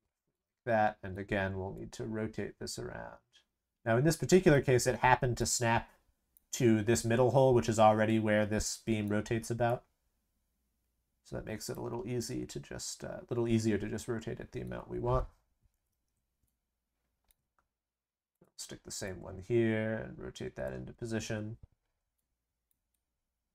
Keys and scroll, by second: 15.7 ctrl+c, 15.8 ctrl+v.